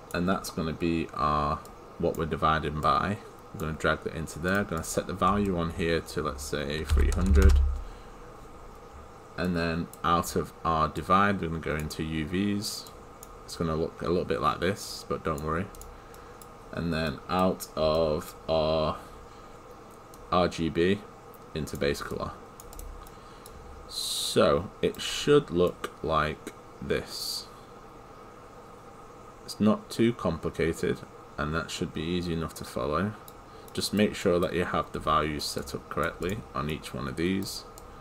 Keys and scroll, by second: 9.5 Return.